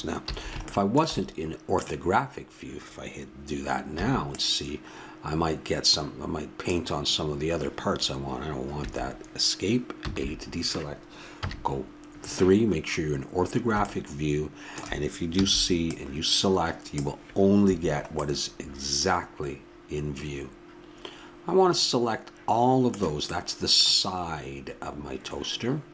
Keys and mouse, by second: 0.3 a, 4.0 c, 10.0 a, 11.4 KP_3, 14.6 middle click, 15.4 c, 18.9-23.8 middle drag.